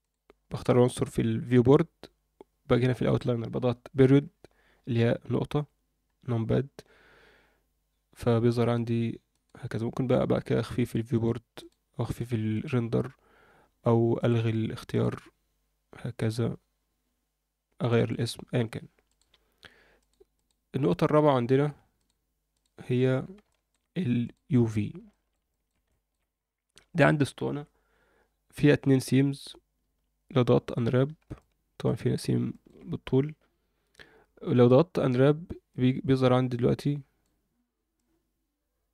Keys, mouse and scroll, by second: 0.0 drag, 0.4 click, 5.5 KP_Decimal, 9.3 click, 10.8 click, 11.6 click, 12.0 click, 12.5-13.7 drag, 13.7-15.1 scroll down 2, 14.2-15.1 drag, 16.2 click, 17.8 click, 17.9-19.1 drag, 19.9 click, 20.3 click, 21.9-22.6 drag, 23.0 scroll down 2, 23.4 shift+middle drag, 24.2 click, 24.5 scroll up 1, 25.1 shift+middle drag, 25.5 ctrl+middle click, 25.9 shift+middle click, 26.3-26.7 scroll up 1, 26.7 Tab, 27.2 scroll down 1, 27.5 a, 29.8 u, 31.4 middle click, 32.5 alt+shift+middle click, 35.7 click, 37.9-38.9 drag.